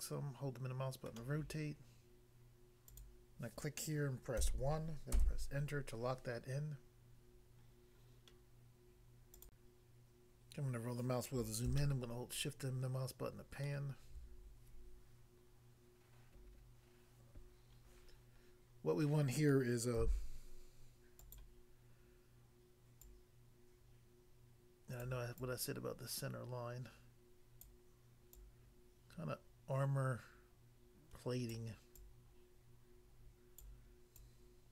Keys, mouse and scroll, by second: 1.1 middle click, 2.9 click, 3.0 click, 4.4 1, 5.1 Return, 9.4 click, 9.6 click, 10.5 scroll up 1, 11.7 shift+middle click, 20.0 f, 21.3 click, 21.4 click, 23.0 click, 25.1 click, 25.4 click, 27.7 click, 28.3 click, 31.5 click, 31.9 click, 33.6 click, 34.2 click.